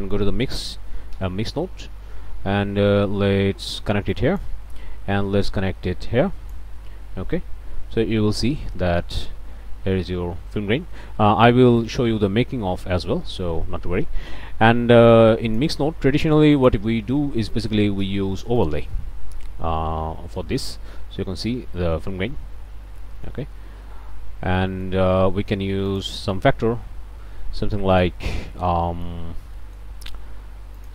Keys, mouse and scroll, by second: 0.2 m, 0.4 i, 0.5 x, 1.1 Return, 3.6 click, 4.1 click, 5.4-6.7 drag, 7.7-8.2 scroll up 1, 8.3 scroll down 2, 8.7 middle click, 9.2 ctrl+space, 9.6 ctrl+scroll up 2, 10.7 ctrl+space, 11.2-11.8 ctrl+scroll up 3, 11.8 middle click, 15.1 click, 16.5 click, 18.6 click, 19.9 scroll down 1, 20.4 click, 21.0-21.4 scroll up 1, 21.4 ctrl+click, 21.6 ctrl+space, 22.0-22.5 ctrl+scroll up 3, 22.6 scroll down 1, 23.0 middle click, 23.6 ctrl+space, 24.6 click, 25.8 click, 27.9 click, 28.7 scroll up 1, 28.8 click, 29.2 scroll down 1, 29.6 click, 30.8 click.